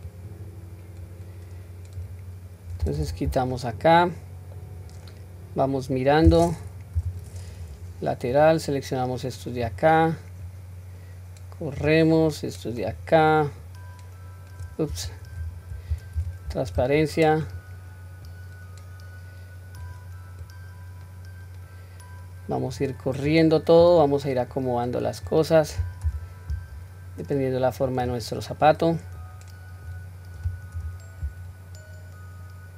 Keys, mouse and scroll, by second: 0.1-2.0 drag, 3.0 q, 3.5-4.6 middle drag, 4.9-5.6 scroll down 1, 6.0-6.5 scroll down 1, 7.0 KP_3, 7.6-7.9 scroll up 1, 8.3-9.7 drag, 10.4 click, 12.2 click, 13.7 click, 15.2 ctrl+a, 16.2 q, 16.8 click, 18.2 click, 20.4-22.8 drag, 23.3 click, 24.6 click, 26.0 g, 29.2-29.9 drag, 30.7 g.